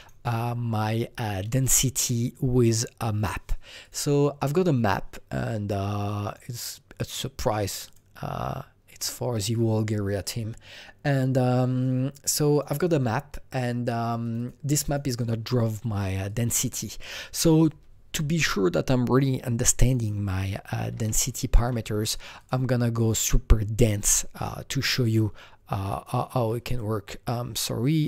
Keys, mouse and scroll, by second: 3.8 click, 6.2 click, 7.7 click, 7.8 double click, 11.4 double click, 11.4 click, 12.5 click, 12.6 double click, 14.2 click, 14.3 double click, 14.8 click, 16.2-19.0 drag, 19.0 click, 19.8 click, 19.9 double click, 20.7 KP_1, 21.0 KP_0, 21.5 KP_Enter, 22.3 click, 23.1 click, 24.8 click, 25.8-28.0 click.